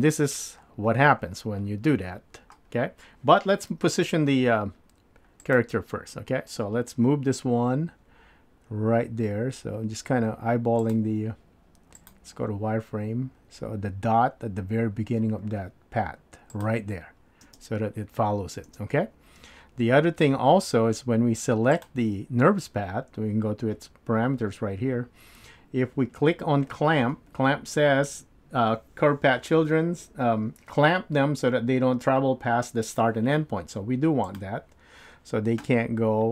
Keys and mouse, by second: 3.7 KP_7, 10.3 g, 12.0 click, 13.4 g, 17.4 space, 18.7 space, 21.8 click, 34.3 click.